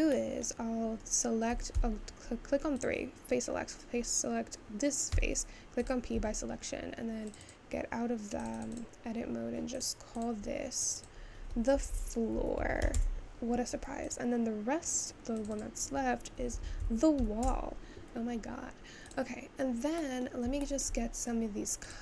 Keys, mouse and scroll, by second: 0.2 middle click, 0.8-1.8 scroll down 2, 1.8 3, 2.8 click, 6.0 p, 6.5 Tab, 7.6 click, 8.7-9.8 drag, 11.0-12.9 drag, 12.9 o, 14.1 click, 15.6-18.3 drag, 18.3 scroll up 2, 19.1 click, 19.7-20.2 scroll up 3, 20.2 middle click, 20.4 scroll down 2, 20.7-22.0 shift+middle drag.